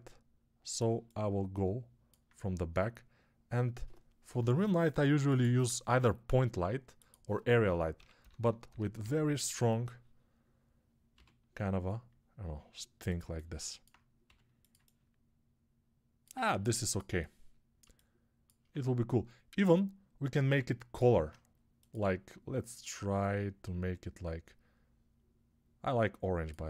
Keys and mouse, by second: 0.0-13.1 drag, 8.2-13.1 middle drag, 8.2 KP_0, 11.0 g, 14.1 g, 21.1-26.6 drag.